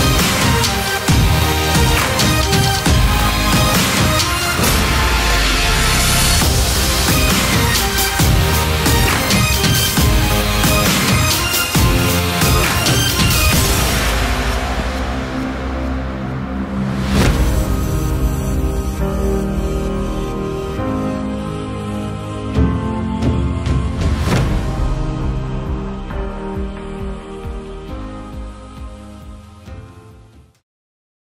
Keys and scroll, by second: 0.7 g, 1.0 f, 1.7 e.